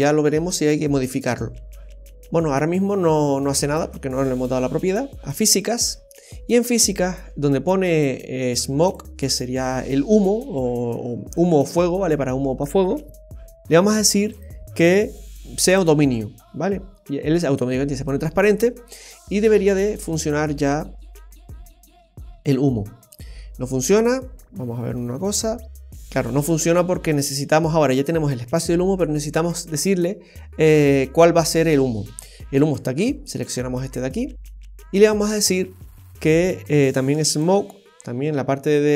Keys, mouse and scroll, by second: 1.3-1.9 scroll up 1, 3.1 middle click, 5.2 click, 5.6-5.9 scroll down 1, 8.8 click, 10.3-10.9 scroll down 2, 14.3 click, 14.7 click, 18.3-19.0 scroll up 4, 19.0 middle click, 19.4 scroll up 1, 19.4 space, 23.7 space, 24.6-25.4 scroll down 7, 32.6 click, 37.3 click, 37.8-38.7 scroll down 4.